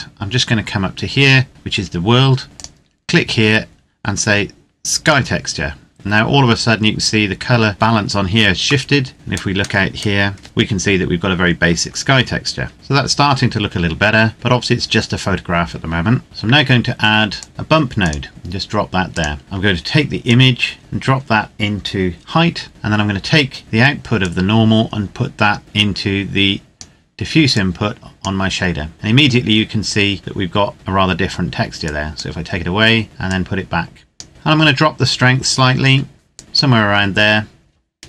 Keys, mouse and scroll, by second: 2.4 click, 5.0 click, 8.8 middle click, 9.1-10.4 scroll down 1, 10.4 KP_1, 11.0-11.9 scroll down 1, 11.9-13.1 scroll up 1, 13.1-14.4 scroll down 1, 16.2-17.3 scroll down 4, 17.3 click, 18.0 click, 20.2 click, 24.0 click, 31.8 click, 35.0-36.4 scroll up 1, 36.4 click.